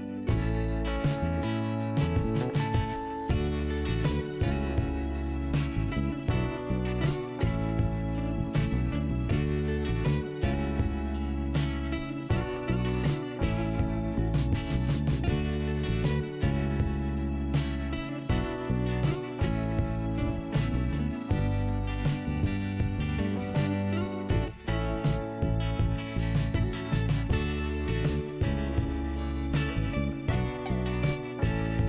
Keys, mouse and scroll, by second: 2.3 click, 2.5 click, 3.6 click, 4.3 click, 6.6 click, 12.8-13.1 scroll down 2, 14.2 scroll up 1, 15.5 5, 17.6 click, 18.2 scroll down 1, 19.4 click, 19.8 scroll down 1, 20.6 scroll up 1, 21.9-22.4 scroll down 1, 22.4 scroll up 1, 23.7 click, 24.9 click.